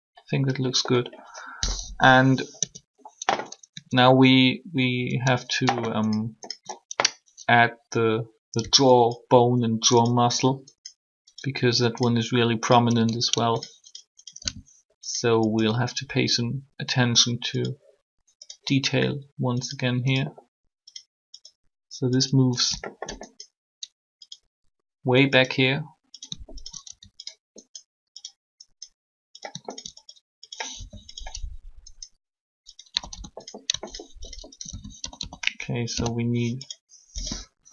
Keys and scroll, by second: 1.6 3, 2.5 Tab, 8.6 e, 9.8 e, 30.7 shift+r, 32.9 typing, 35.6 shift+k.